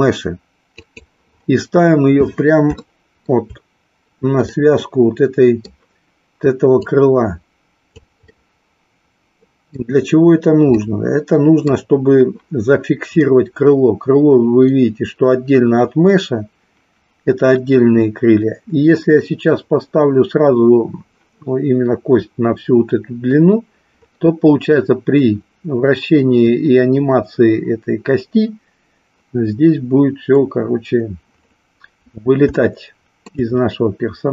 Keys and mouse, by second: 0.7 click, 2.8 shift+middle click, 4.5-5.7 middle drag, 6.7-8.1 drag, 8.5-9.9 middle drag, 10.7-11.8 middle drag, 32.6 shift+middle click.